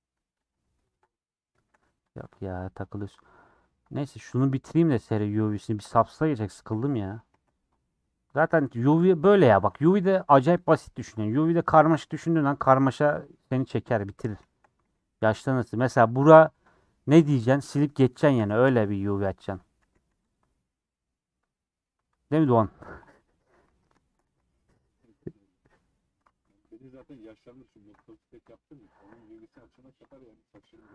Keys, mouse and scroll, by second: 0.1 2, 0.2 2, 0.3 click, 1.1-2.1 middle drag, 2.1 ctrl+click, 2.2-3.5 middle drag, 3.5 ctrl+click, 4.2 shift+middle click, 5.1 scroll up 3, 5.3 middle click, 6.2 click, 6.7-8.5 middle drag, 8.5 ctrl+click, 8.6 middle click, 9.4 ctrl+click, 10.1 scroll down 1, 10.2 a, 10.4 u, 10.8-12.9 middle drag, 12.9 scroll up 1, 13.4 middle click, 13.8 3, 13.9 middle click, 14.8 alt+z, 15.7 click, 16.0-19.3 middle drag, 19.3 x, 19.6 middle click, 19.8 a, 20.0 u, 21.8-22.9 middle drag, 22.9 KP_7, 23.7 alt+z, 24.2 alt+z, 24.4-26.0 middle drag, 26.0 click, 26.2 alt+z, 26.5-27.0 scroll up 1, 27.0 click, 29.0 KP_Add, 29.2 KP_Add, 30.5 ;.